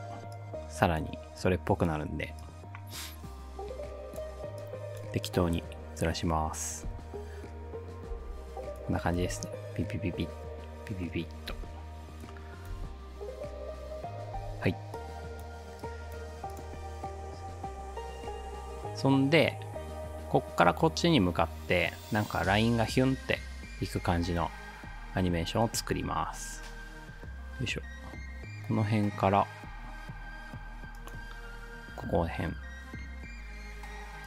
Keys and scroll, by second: 6.9 space, 8.1 space, 9.2 space, 11.5 space, 12.8 space, 14.4 space.